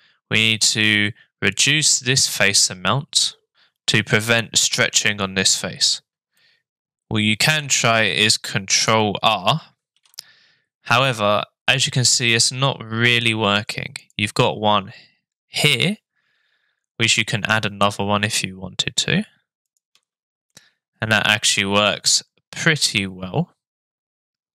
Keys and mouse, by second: 6.4-7.6 middle drag, 9.9 ctrl+r, 19.9 Tab, 20.5-24.5 middle drag.